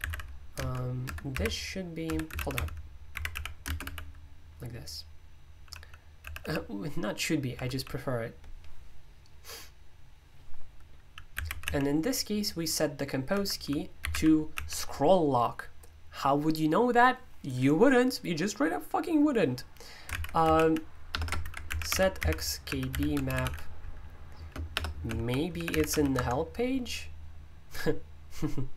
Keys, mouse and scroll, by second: 0.0-4.3 typing, 5.3-7.7 typing, 11.1-12.1 typing, 13.2-15.0 typing, 20.1 super+o, 20.1-26.6 typing.